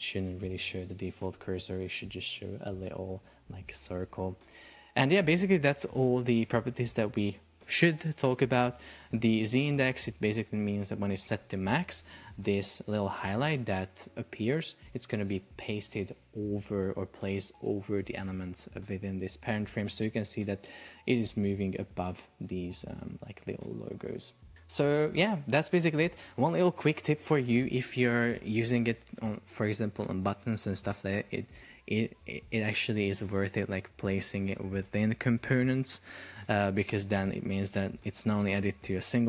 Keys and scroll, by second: 3.9 Escape, 11.9 super+p, 24.0 Escape.